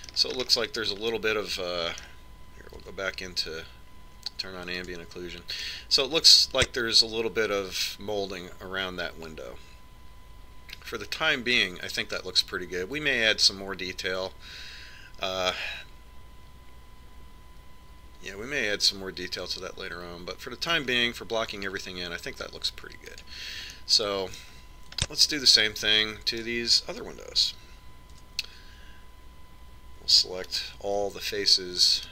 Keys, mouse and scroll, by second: 0.4-4.7 middle drag, 4.6 Tab, 6.5 click, 8.0 click, 8.4 middle click, 10.2 middle click, 12.1 middle click, 24.9 click, 25.7 middle click, 26.2-28.7 middle drag, 30.0 Tab.